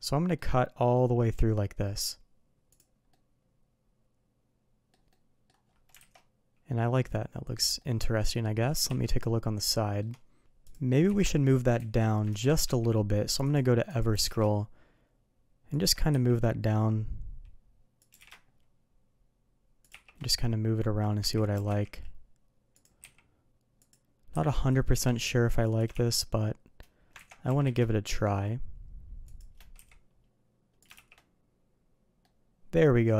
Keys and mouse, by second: 3.1-4.9 middle drag, 5.1-5.4 middle drag, 5.9 alt+a, 6.1-7.5 middle drag, 7.8-8.1 middle drag, 8.8 KP_3, 9.7 shift+middle drag, 11.1 ctrl+z, 12.6 q, 14.1 g, 16.1 s, 18.1 g, 19.9 shift+2, 21.2 ctrl+z, 21.5 g, 24.3 s, 25.9 shift+2, 27.2 ctrl+z, 27.4 g, 29.8 s, 30.9 shift+2, 32.2-33.1 middle drag.